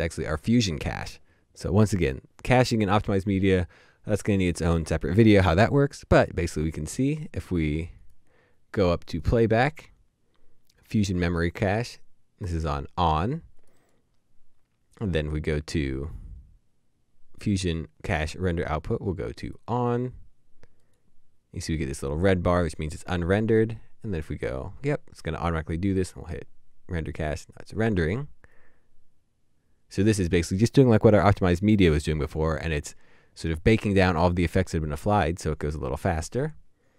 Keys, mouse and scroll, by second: 7.1 typing, 7.1 right click, 13.8 right click, 20.8 right click.